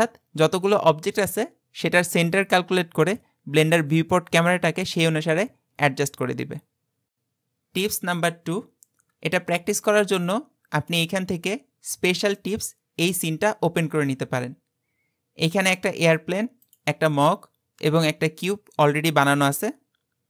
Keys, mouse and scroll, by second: 10.8-12.6 drag, 14.4-15.8 scroll down 8, 15.8 click, 16.6 click, 17.9 click.